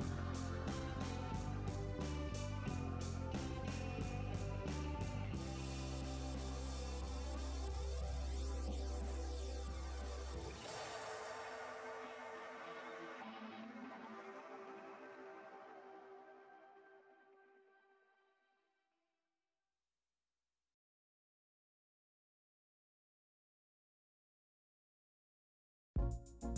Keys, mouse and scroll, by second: 9.7 typing, 10.2 Return, 13.9 typing, 14.2 Return, 25.0 typing.